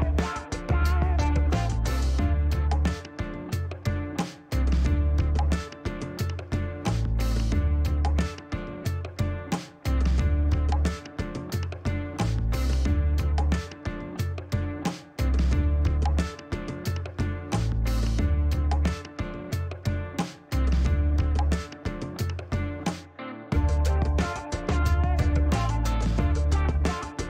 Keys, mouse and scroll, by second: 0.7 click, 2.4 shift+right click, 3.2 shift+scroll up 1, 3.5 middle click, 5.9 click, 10.1 click, 11.2 shift+middle click, 11.5 shift+middle click, 13.0 click, 14.2 click, 14.8 space, 15.6 right click, 18.3 click, 20.1 click, 21.1 middle click, 21.8 scroll up 1, 22.9 click, 25.7 click.